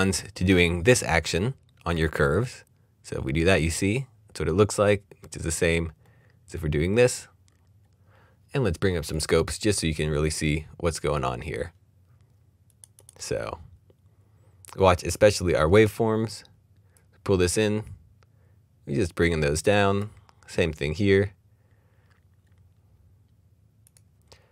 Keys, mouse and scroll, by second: 5.6-6.7 scroll down 1, 6.7-7.1 scroll up 1, 7.1-7.4 scroll down 1, 7.4-9.1 scroll up 1, 9.3 click, 14.3 click, 16.9 click, 20.8-22.0 scroll down 1, 22.0 scroll up 1, 22.8-23.4 scroll up 1, 23.9 click.